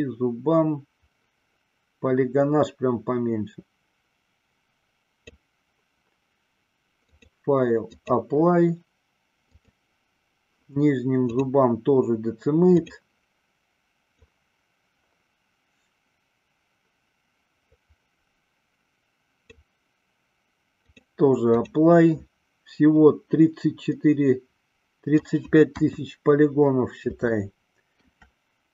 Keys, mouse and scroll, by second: 7.1-9.1 drag, 9.7 click, 11.4-13.0 drag, 14.1-19.7 drag, 20.9-22.5 drag, 24.0-25.5 middle drag, 25.9 KP_1, 27.5-28.1 shift+middle drag.